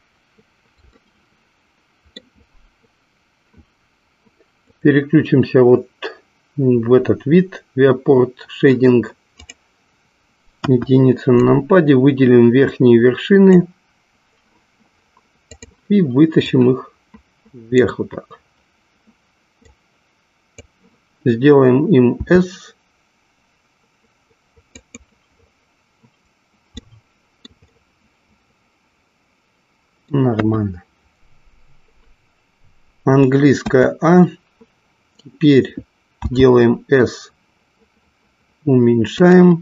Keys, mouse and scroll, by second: 1.3 shift+middle click, 4.8 click, 10.6 KP_1, 11.4-13.7 drag, 15.5 click, 16.6-18.0 drag, 19.7 click, 22.2 s, 24.9 click, 26.8 shift+middle click, 27.8-30.3 middle drag, 30.5 KP_1, 33.6 a, 36.3 s.